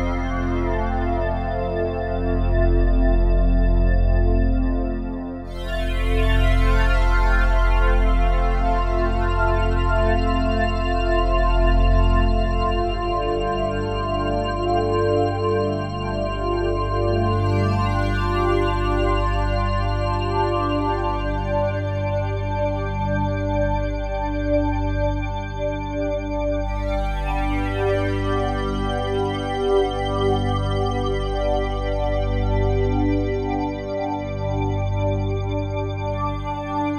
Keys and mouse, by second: 5.4-8.7 shift+drag, 9.1 alt+click, 10.5 shift+click, 11.0 alt+click, 11.5 ctrl+alt+click, 11.9 ctrl+alt+click, 12.4 ctrl+alt+click, 13.8 ctrl+alt+click, 14.2 alt+click, 15.0 ctrl+alt+click, 16.6 ctrl+alt+click, 17.1 alt+shift+click, 18.2 alt+click, 18.6 alt+click, 19.1 ctrl+alt+click, 19.6 alt+click, 21.2 typing, 22.8 shift+click, 24.1 ctrl+alt+click, 24.6 alt+click, 25.3 ctrl+alt+click, 25.7 ctrl+alt+click, 26.4 alt+click, 27.5 alt+click, 29.0 ctrl+alt+click, 29.0 typing, 29.5 alt+click, 30.7 Tab, 32.6 click, 33.5-36.9 drag.